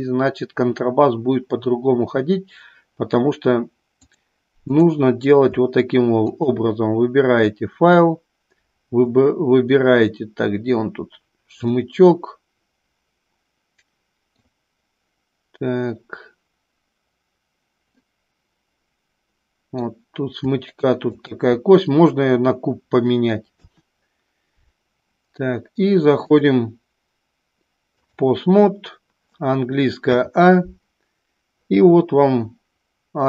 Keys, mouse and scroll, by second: 4.2-5.5 drag, 12.7-15.2 middle drag, 18.2 middle click, 19.2-20.4 middle drag, 21.6-22.5 drag, 26.6-28.8 drag, 31.0 a.